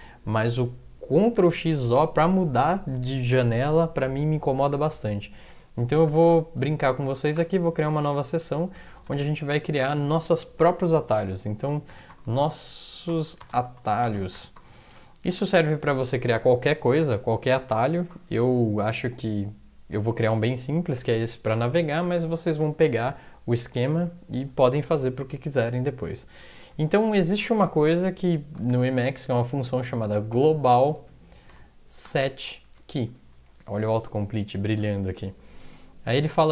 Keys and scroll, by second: 6.1 Return, 6.2 Return, 6.8 Up, 7.0 Up, 7.3 Return, 8.6-9.4 typing, 11.7-15.2 typing, 15.3 Return, 28.7-32.0 typing, 29.3 Left, 30.9 Tab, 32.6 Tab.